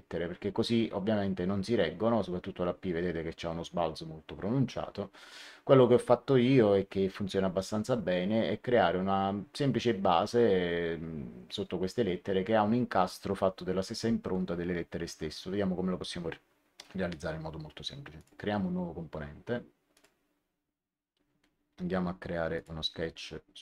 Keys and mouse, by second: 18.1 click, 19.8 click, 22.5 click.